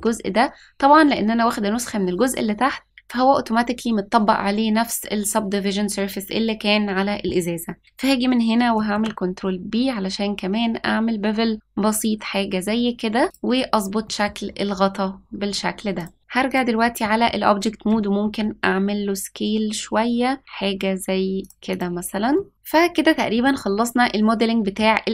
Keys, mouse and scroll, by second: 8.8 ctrl+b, 14.0 middle click, 14.4-15.9 scroll down 2, 15.9 click, 16.4 click, 16.9 middle click, 18.1 s, 21.6 click, 22.3 middle click, 22.6-23.0 scroll down 1, 23.0-23.4 scroll up 1, 23.4-24.7 middle drag.